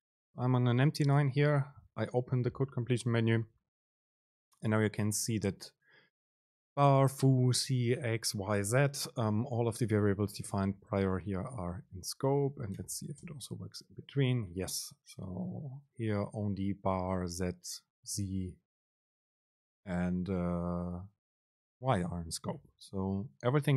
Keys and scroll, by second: 13.0 Return, 13.6 super+space.